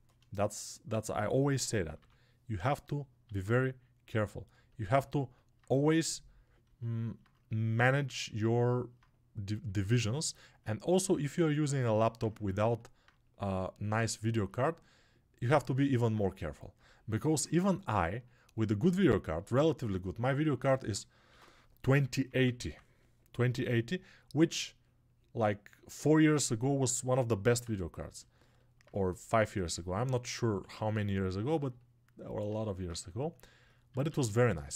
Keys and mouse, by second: 8.6-34.7 drag.